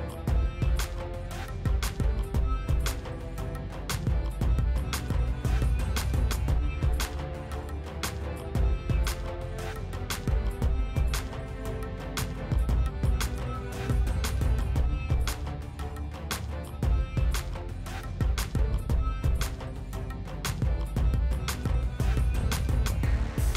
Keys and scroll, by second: 9.1 F4, 20.3 m.